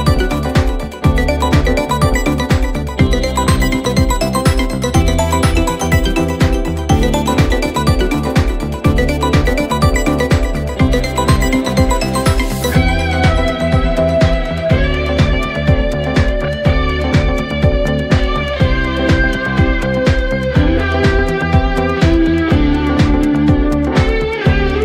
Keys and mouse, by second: 0.1 middle click, 1.1 middle click, 1.7 middle click, 3.4 middle click, 4.7 middle click, 5.1 middle click, 7.5 middle click, 8.9 middle click, 9.5 middle click, 10.7 middle click, 11.0 middle click, 11.5 middle click, 12.9 middle click, 15.5 middle click, 15.8 middle click, 19.8 middle click, 20.1 middle click, 22.0 middle click, 22.6 middle click, 23.5 middle click, 24.4 middle click.